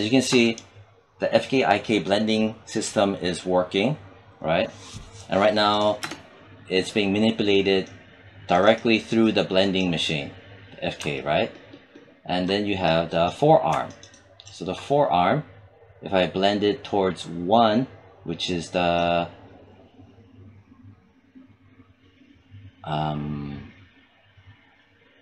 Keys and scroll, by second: 5.8 space.